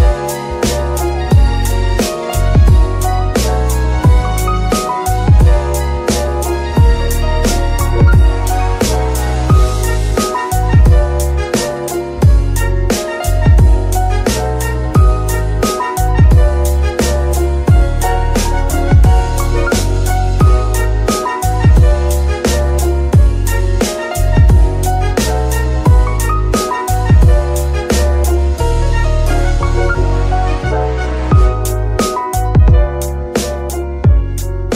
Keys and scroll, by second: 2.3 g, 2.4 y, 7.1 shift+d, 7.5 shift+y, 9.7 shift+g, 9.8 shift+y, 11.8 shift+g, 11.9 shift+y, 18.0 g, 19.0 Escape, 19.6 shift+Escape, 20.8 g, 21.5 Escape, 22.5 g, 23.2 Escape, 30.9 F2, 31.5 Escape, 32.4 F2, 33.4 BackSpace, 33.6 BackSpace, 33.7 BackSpace, 33.8 BackSpace, 34.3 Left, 34.4 Left.